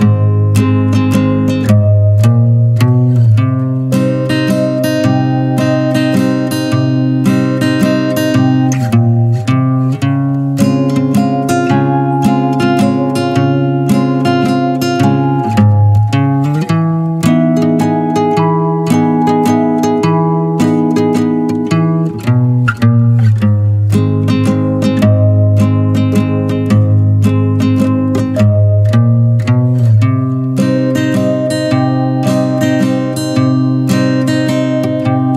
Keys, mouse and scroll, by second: 0.0-0.6 middle drag, 0.6 scroll up 1, 0.8 Tab, 0.9 click, 1.1 scroll down 2, 1.3-2.1 middle drag, 2.1 Tab, 2.4-3.0 middle drag, 3.0 click, 3.6 middle click, 4.1 l, 4.7-5.0 middle drag, 5.0 Tab, 5.2 click, 5.4 middle click, 5.7 click, 5.9-7.6 middle drag, 7.6 click, 8.0-8.7 middle drag, 8.7 click, 9.0-10.3 middle drag, 10.3 n, 11.5 click, 12.1 middle click, 12.4 click, 12.6 Tab, 12.9-13.5 middle drag, 13.5 click, 14.2 3, 14.4 click, 14.8-15.6 middle drag, 15.6 r, 16.6 middle click, 17.5 e, 18.6 middle click, 19.3-20.2 scroll up 1, 20.2 click, 20.5-21.8 shift+middle drag, 21.8 click, 22.1-22.6 middle drag, 22.6 n, 24.4 click, 24.9-25.4 drag, 25.4 middle click, 25.6 click, 25.8 Tab, 26.2-27.2 middle drag, 27.2 click, 27.5 middle click, 28.4 e, 29.8 click, 30.3 shift+click, 30.7 middle click, 31.2 e, 32.4-34.8 middle drag, 34.8 ctrl+z, 35.2 ctrl+z.